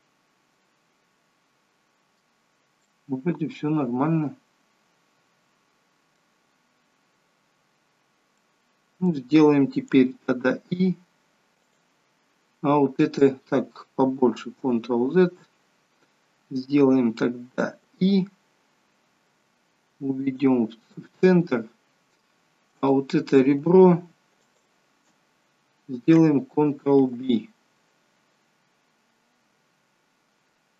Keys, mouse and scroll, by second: 2.9 middle click, 6.7 scroll down 1, 8.1 scroll down 1, 8.4 middle click, 10.1 i, 14.7 ctrl+z, 15.5-15.9 scroll down 2, 17.9 i, 22.8 click, 24.5 alt+shift+click, 27.2 ctrl+b.